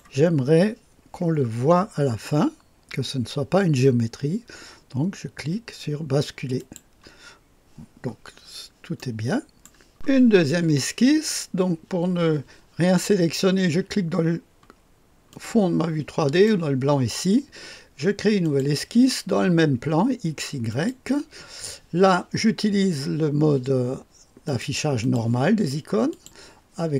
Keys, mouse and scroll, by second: 6.5 click, 8.3-9.0 scroll down 1, 9.0 click, 15.3 click, 16.3 click, 18.4 click, 20.7 click, 24.4 click, 25.0 click, 26.1 click.